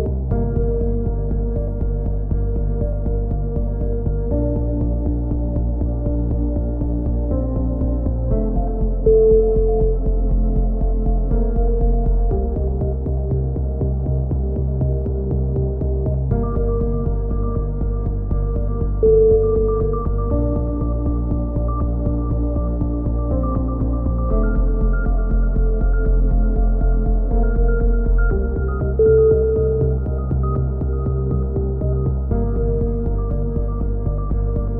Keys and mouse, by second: 1.4 click, 2.1 s, 3.8 a, 4.0 z, 4.1 middle click, 4.5-5.6 drag, 7.7-8.8 drag, 12.3-14.0 drag, 13.3-15.0 right drag, 14.8-17.3 drag, 17.3 middle click, 17.6 click, 18.6 middle click, 18.7 right click, 20.8 ctrl+z, 22.9 a, 23.2-25.1 drag, 25.5 right click, 26.4 middle click, 27.0 click, 30.5 middle click, 30.8-32.6 drag, 33.3 click, 34.3 click.